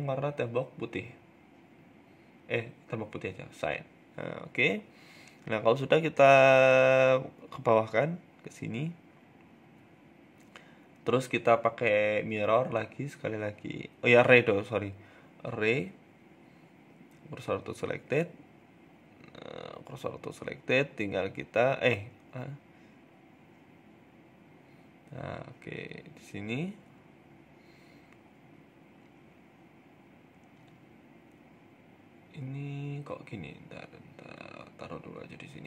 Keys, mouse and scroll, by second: 2.7 click, 2.9 Tab, 3.2 middle click, 3.5 scroll down 1, 3.9 KP_3, 4.1 KP_1, 4.6 KP_3, 5.4 middle click, 5.8 shift+middle click, 6.1 scroll up 3, 6.3 shift+middle click, 7.3 g, 8.5 s, 9.2 scroll up 4, 9.4 shift+middle click, 10.7 click, 11.3 click, 12.8 middle click, 15.3 right click, 15.9 shift+s, 16.9 right click, 17.3 shift+s, 18.7 KP_3, 19.3 KP_1, 19.4 Tab, 20.6 g, 21.5 a, 21.5 s, 23.3 s, 23.7 middle click, 24.3 scroll up 2, 24.5 shift+middle click, 24.8 g, 26.9 click, 27.3 f, 27.5 z, 28.2 g, 29.5 shift+middle click, 29.9 g, 30.6 a, 30.9 shift+middle click, 32.9 g, 34.3 g.